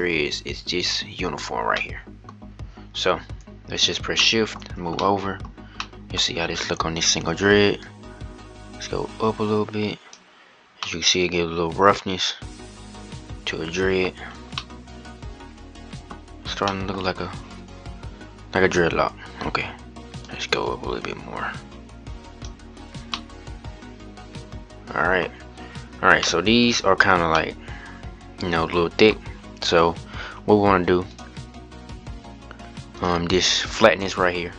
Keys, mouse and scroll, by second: 1.5-2.2 middle drag, 2.2-2.7 scroll down 1, 3.9-4.3 shift+middle drag, 4.3-4.7 scroll up 2, 4.7-6.0 middle drag, 6.0 scroll up 1, 7.6-10.8 drag, 10.8-13.6 middle drag, 13.8-14.3 scroll down 4, 14.3-16.0 middle drag, 16.0 scroll up 2, 16.2 scroll down 1, 16.4-16.8 middle drag, 16.8 scroll up 2, 20.0-22.8 drag, 22.8-25.0 middle drag, 25.0-25.4 scroll up 2, 25.4-26.0 scroll down 5, 26.0-29.0 middle drag, 29.0-29.5 scroll up 1, 29.5-30.8 scroll down 10, 30.8-31.7 drag, 31.7-32.7 scroll down 2, 32.7-34.5 drag.